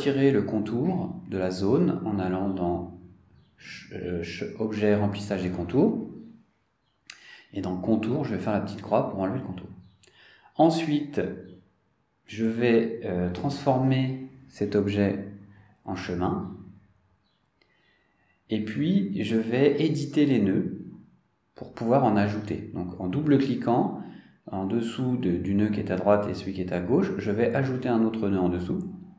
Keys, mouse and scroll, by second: 0.6 click, 4.9 click, 6.9 click, 10.3 click, 11.1 click, 12.9 click, 14.6 click, 16.6 click, 19.4 click, 23.3 click, 28.6 click.